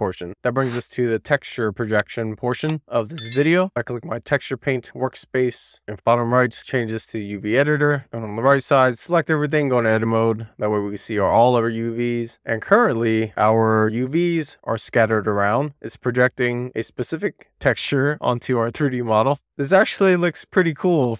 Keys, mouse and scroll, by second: 0.7 click, 4.7-8.0 drag, 8.7 Tab, 9.7-10.1 scroll down 1, 10.1 scroll up 1, 10.4 Tab, 10.6-11.2 scroll down 2, 11.2 a, 11.8 Tab, 12.8 a, 14.3-14.8 scroll down 1, 14.8 scroll down 3, 15.1 shift+middle click, 15.8-18.1 middle drag, 18.6-19.0 scroll up 2, 19.4-20.6 scroll down 2, 20.6-21.1 middle drag.